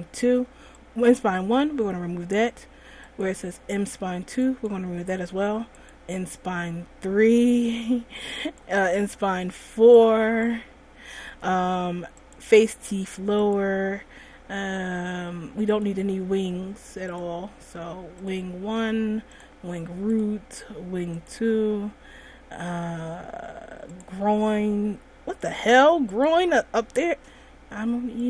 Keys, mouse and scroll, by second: 0.9 click, 3.3 click, 4.6 click, 6.0 click, 8.3 click, 10.1 click, 12.4 click, 13.6 click, 14.6-15.9 scroll down 2, 15.9 click, 17.2 click, 18.4 click, 19.5 click, 20.3 click, 21.3 click, 22.6-24.1 scroll down 5, 24.1 click, 26.3 click.